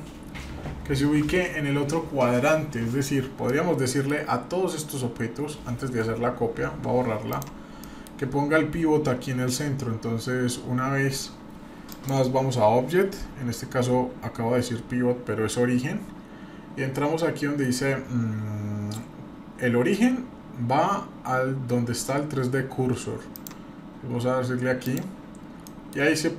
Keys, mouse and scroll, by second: 3.5-4.1 middle drag, 6.5 Delete, 7.3 click, 7.8 middle drag, 11.9-22.1 drag, 23.3-24.9 drag, 25.6 middle click, 26.1-26.3 scroll up 2.